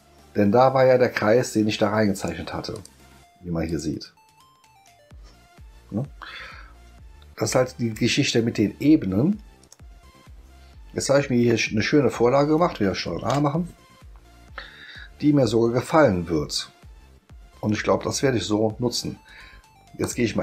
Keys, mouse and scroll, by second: 2.2 click, 2.7 click, 3.7 click, 6.1 scroll up 2, 6.8 ctrl+scroll up 1, 7.1 ctrl+scroll down 4, 9.6 click, 13.2 ctrl+a, 20.0 click.